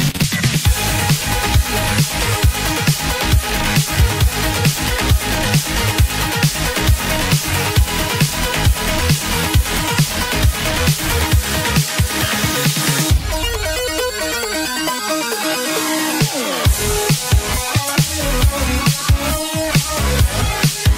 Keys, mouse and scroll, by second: 0.1 scroll down 1, 0.3-2.3 scroll up 2, 11.1-12.1 scroll down 12, 12.1 scroll up 4.